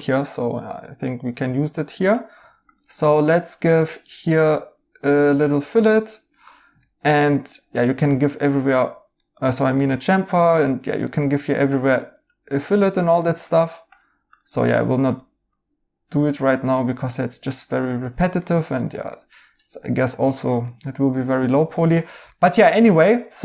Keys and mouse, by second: 6.8 right click, 8.1 right click, 11.0 right click, 18.0 ctrl+z, 18.4 right click, 20.5 right click.